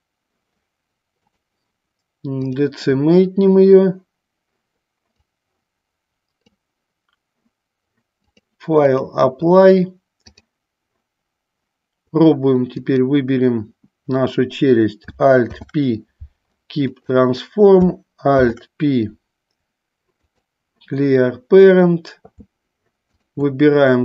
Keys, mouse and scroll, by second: 1.5-2.8 drag, 5.5-6.6 drag, 8.5 click, 10.5-11.8 drag, 13.0 click, 15.6 alt+p, 23.2 shift+click.